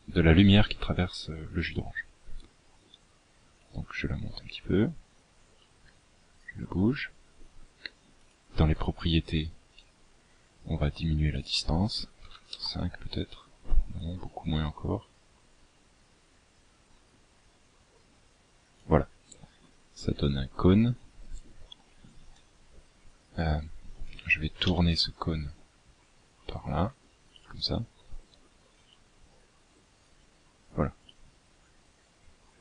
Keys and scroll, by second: 22.9 r.